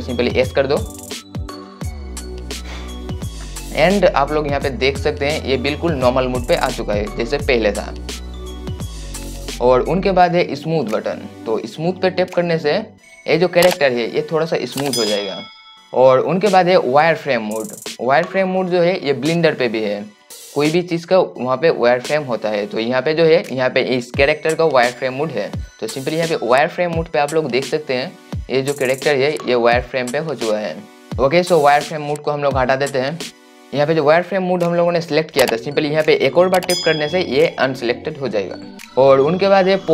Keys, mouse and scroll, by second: 4.5 scroll down 1, 5.0 scroll up 1, 6.0 scroll down 1, 12.6 click, 28.1-29.8 right drag, 38.6 click.